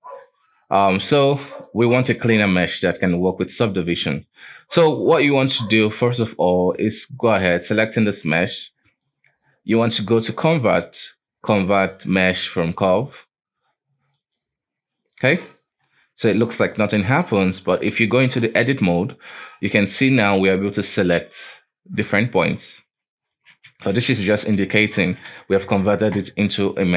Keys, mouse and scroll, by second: 0.3-1.6 scroll down 4, 1.6 click, 5.8-7.6 shift+middle drag, 7.6 right click, 8.8-12.0 drag, 15.6-16.3 scroll up 2, 16.3-17.5 scroll down 3, 17.5-19.0 drag, 19.0-20.3 scroll up 3, 20.3 right click, 21.4 right click, 22.2 right click, 22.9 right click, 23.7 ctrl+z, 23.9 ctrl+z, 24.1 ctrl+z, 24.5 ctrl+z, 24.8 ctrl+z, 25.0 ctrl+z, 25.2 ctrl+z, 26.5 Tab.